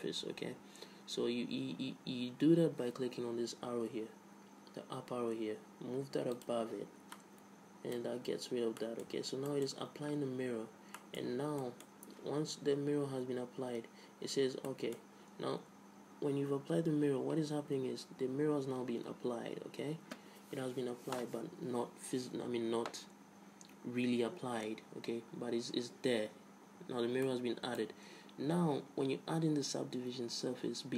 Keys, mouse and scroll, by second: 6.6 click, 7.4-8.6 middle drag, 9.4 Tab, 11.4 middle click, 11.8 Tab, 13.3 middle click, 15.0-16.7 middle drag, 27.5-29.2 middle drag.